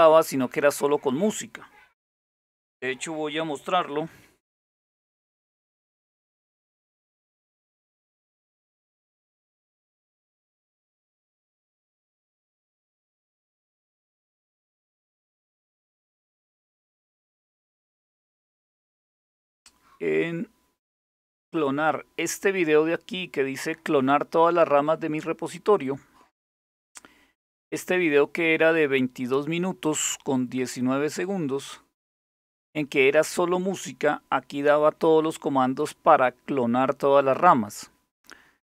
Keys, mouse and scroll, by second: 3.7 super+6, 5.3 alt+super+g, 13.4 click, 27.1 click.